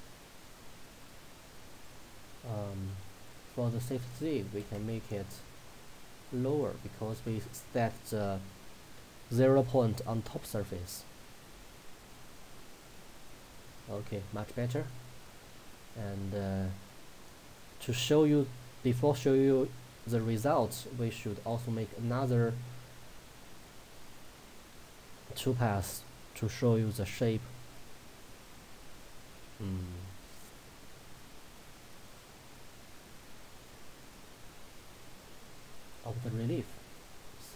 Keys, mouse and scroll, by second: 0.6-1.7 scroll up 1, 1.8-3.6 drag, 11.7 scroll down 1, 12.8 click, 20.6 click, 27.0-28.0 middle drag, 28.6 scroll up 1, 28.8 scroll down 1, 32.1 click, 33.6-34.2 scroll up 1, 35.0 click, 35.6-36.6 scroll up 1, 37.0 shift+click.